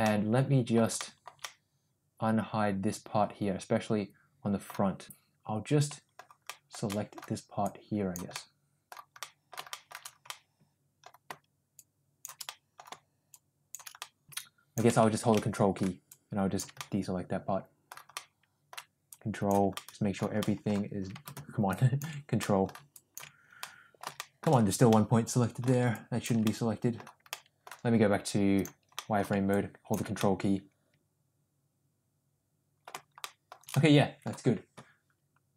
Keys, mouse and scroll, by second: 0.0-1.3 middle drag, 1.4-4.7 middle drag, 5.1-6.2 middle drag, 6.5 shift+middle click, 6.9 middle click, 7.7 click, 8.3 middle click, 9.2 middle click, 9.7 shift+middle click, 10.3 middle click, 12.0 shift+click, 12.5 middle click, 13.4 shift+click, 14.0 middle click, 14.3 ctrl+z, 14.5 click, 15.4 middle click, 16.1 click, 16.8-17.9 middle drag, 18.1 middle click, 19.1 ctrl+click, 19.8 middle click, 20.5 middle click, 21.8 ctrl+click, 22.4 middle click, 23.0 ctrl+click, 23.6 middle click, 24.2 shift+middle click, 24.9 middle click, 25.9 ctrl+click, 26.5 middle click, 27.3 middle click, 28.6 click, 29.0 middle click, 29.6 ctrl+click, 30.2-32.8 middle drag, 33.2 shift+middle click, 33.7 middle click.